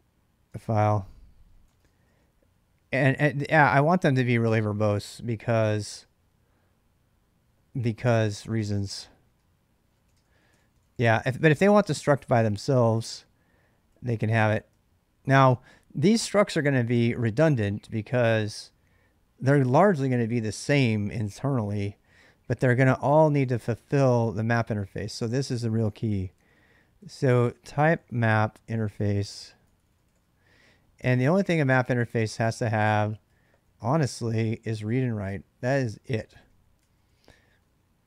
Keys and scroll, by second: 0.1-3.1 typing, 7.2-14.5 typing, 22.8-38.0 typing, 31.8 Return, 34.0 ctrl+[, 35.1 ctrl+[.